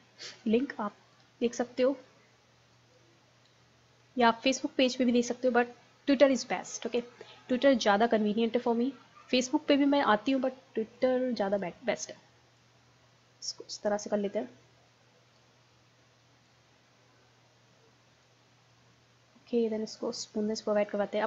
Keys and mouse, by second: 2.5-3.6 drag, 3.6 middle click, 4.5-11.0 drag, 11.5-15.1 drag, 15.7 middle click, 16.5-18.2 drag, 18.5-19.7 middle drag, 19.7 click, 20.3-21.2 middle drag.